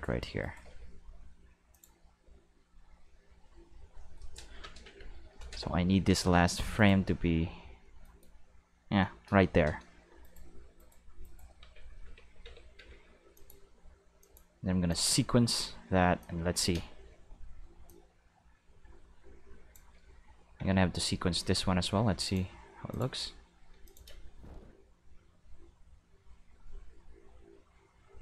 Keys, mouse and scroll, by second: 0.4 shift+right click, 0.6 g, 1.7 click, 6.7 right click, 7.1 g, 8.0 right click, 10.2 shift+right click, 10.8 shift+right click, 11.2 shift+right click, 11.6 Tab, 12.0 a, 12.4 Tab, 12.8 a, 13.3 click, 14.2 click, 14.9 click, 16.2 click, 16.7 space, 17.8 space, 17.9-19.7 drag, 20.6 a, 22.2 click, 22.9 click, 23.8 click, 24.1 space.